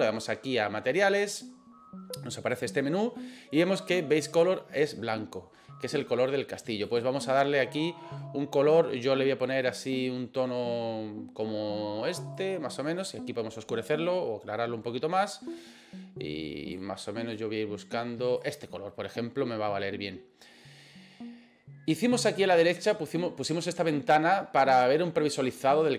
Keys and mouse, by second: 6.9 click.